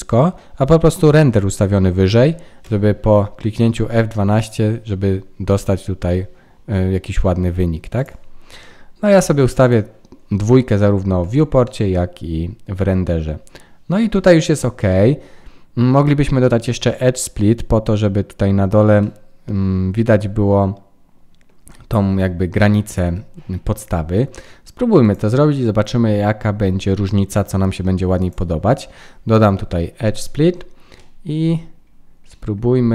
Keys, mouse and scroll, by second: 2.7 F12, 9.6 click, 11.6 middle click, 16.6 middle click, 19.0 middle click, 25.0 click, 29.9-30.7 scroll down 5, 30.7-31.8 scroll down 3, 30.9 middle click, 31.8 scroll up 5, 32.2 middle click.